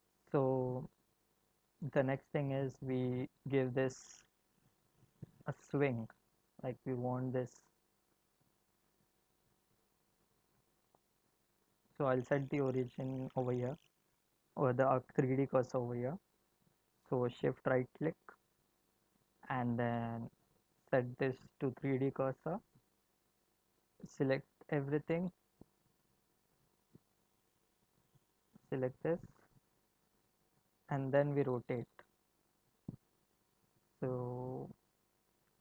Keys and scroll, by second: 31.9 r.